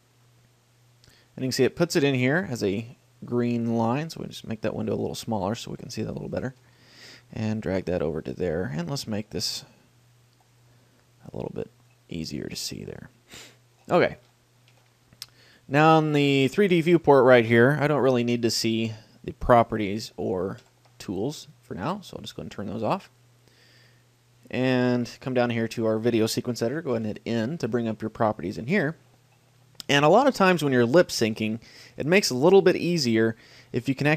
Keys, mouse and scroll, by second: 0.0-1.3 drag, 2.1-3.7 middle drag, 3.7-5.5 drag, 5.5-6.7 middle drag, 6.6 right click, 6.9 g, 8.7-10.7 drag, 11.5-15.0 drag, 14.6-16.3 middle drag, 18.8 n, 20.8 t, 21.7-25.6 middle drag, 27.1 n, 30.1 middle click, 33.5-34.1 middle drag.